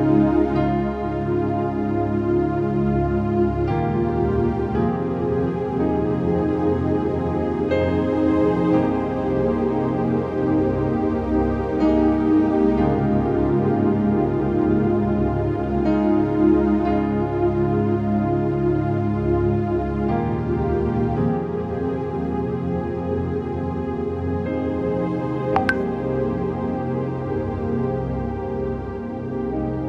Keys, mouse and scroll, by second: 0.0-0.3 typing, 0.4 click, 1.1 ctrl+v, 1.8 click, 2.3 6, 3.4 7, 3.7 shift+click, 5.4 ctrl+t, 6.1 shift+click, 6.8 ctrl+z, 7.2 scroll up 1, 8.4 ctrl+click, 8.9 ctrl+t, 9.4-11.5 shift+drag, 11.5 Return, 12.2-12.6 scroll down 1, 12.6 click, 13.6 scroll down 1, 14.0 click, 15.1 scroll down 1, 26.0 click, 28.8 click.